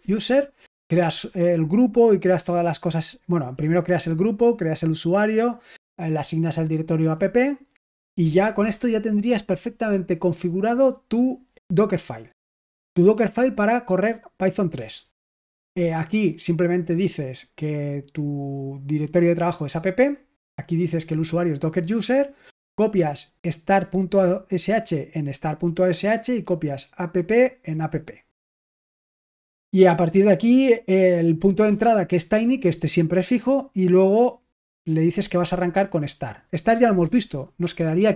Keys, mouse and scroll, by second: 6.3 click, 7.3-7.7 scroll down 2, 17.1-18.6 drag, 19.0 click, 19.5 click, 19.7 click, 21.3 click, 21.5 click, 23.1-26.2 drag, 32.7-34.1 drag, 34.4-37.5 drag, 37.5 Escape.